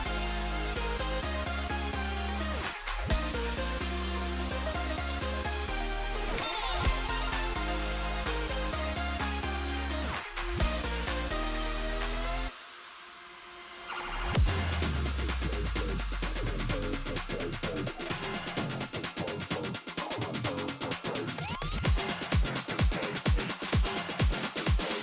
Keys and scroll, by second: 7.1 5, 8.1 Return.